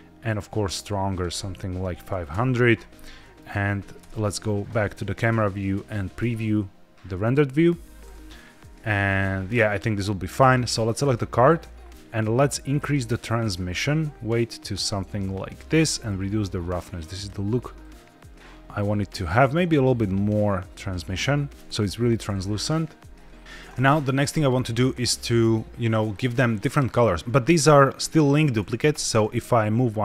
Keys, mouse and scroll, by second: 0.2 click, 1.0-2.3 drag, 2.0 KP_0, 3.1 middle drag, 3.9 KP_0, 6.7 z, 9.4-10.3 scroll up 3, 10.3 click, 12.6 click, 13.6-15.5 drag, 16.0-17.2 drag, 17.7-20.8 drag, 21.5 click, 23.4 click, 26.1-27.1 middle drag, 27.5 middle click, 29.3 Tab, 29.3 g.